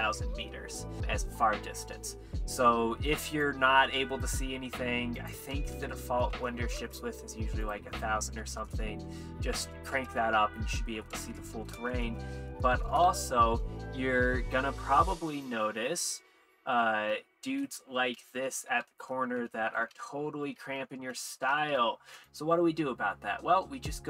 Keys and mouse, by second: 5.2-11.1 drag, 6.3 KP_0, 8.6 KP_0, 8.7 KP_0, 11.1 middle click, 13.0 shift+`, 13.3 w, 13.3 shift+d, 17.0-20.0 typing, 21.7 shift+a, 21.7 shift+e, 21.7 shift+w.